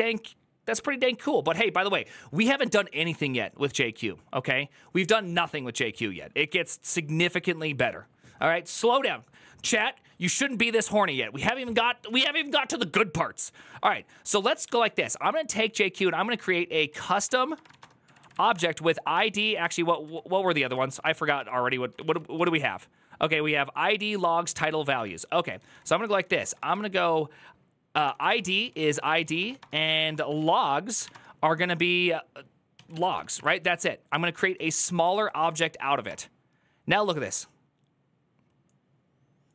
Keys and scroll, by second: 14.3 ctrl+Left, 14.6 ctrl+Left, 15.8-19.6 typing, 19.6 ctrl+Left, 20.2 Right, 20.4 Right, 20.5 ctrl+w, 20.7 ctrl+w, 20.8 ctrl+w, 21.2-22.7 typing, 24.8 Up, 25.2 Left, 25.4 Left, 25.5 Left, 25.6 Left, 26.0-30.9 typing, 32.3-35.3 typing, 35.8 Return.